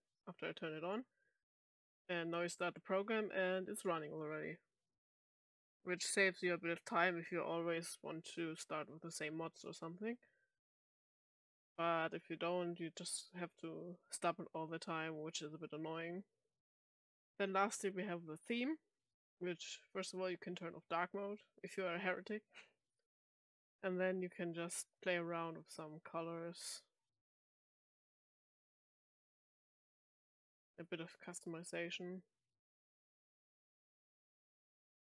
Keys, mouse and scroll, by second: 0.6 click, 0.8 click, 10.8 click, 12.6 click, 13.7 click, 15.2 click, 17.0 click, 20.4 click, 22.9 click, 23.7 click, 24.5 click, 25.2 click, 25.8 click, 26.4 click, 27.0 click, 27.7 click, 28.2 click, 29.0 click, 29.9 click, 30.7 click, 31.3 click, 31.8 click, 32.8 click, 34.4 click.